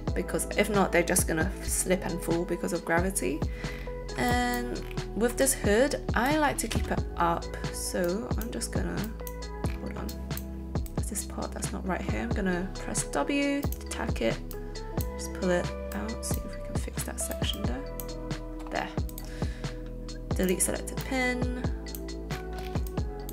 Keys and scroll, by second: 6.7 alt+space, 12.8 w.